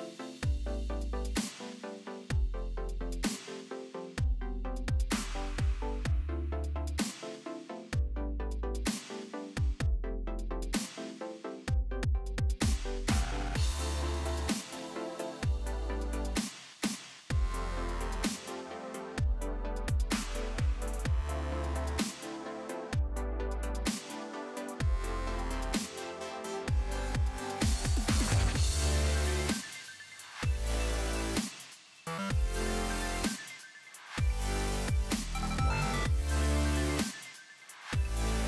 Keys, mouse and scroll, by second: 0.1-1.1 shift+scroll up 2, 1.1 shift+], 2.2 shift+[, 10.3 shift+click, 11.3 shift+right click, 12.8-17.9 shift+drag, 21.1 ctrl+z, 22.3-23.9 typing, 25.3 alt+scroll up 1, 26.9 click, 28.6 ctrl+z, 30.0 click, 31.9-32.5 typing, 33.0 click, 35.9 alt+scroll down 1, 37.5 alt+scroll up 1.